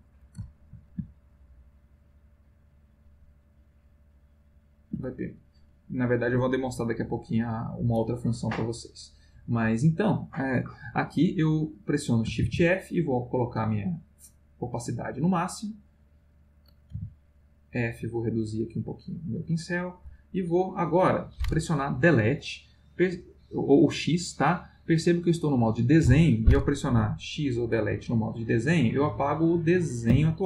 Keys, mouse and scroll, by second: 0.4 ctrl+s, 1.9 click, 2.9-5.0 drag, 5.4 click, 7.1 click, 8.8 click, 12.4 shift+f, 13.6 click, 15.1 click, 16.9 f, 17.9-19.8 drag, 30.1 x.